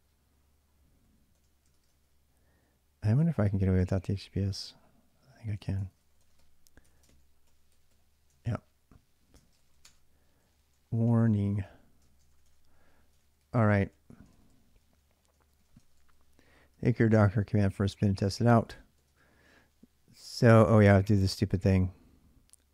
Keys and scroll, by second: 0.0-4.4 typing, 5.6-12.5 typing, 6.9 ctrl+l, 13.0 ctrl+[, 13.0 ctrl+j, 13.6-19.6 typing.